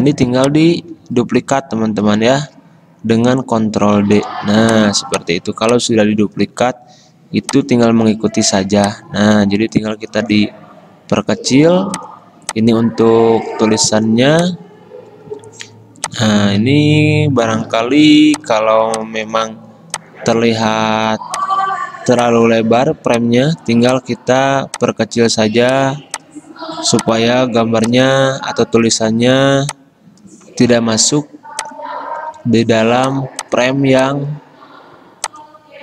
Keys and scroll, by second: 4.0 ctrl+d, 17.8 ctrl+z, 32.6 ctrl+z.